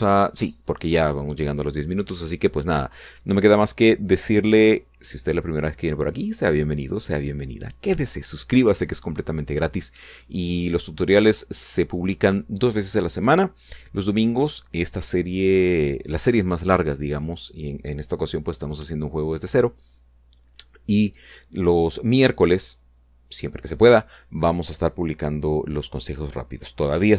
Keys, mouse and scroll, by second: 0.5 click, 1.1 click.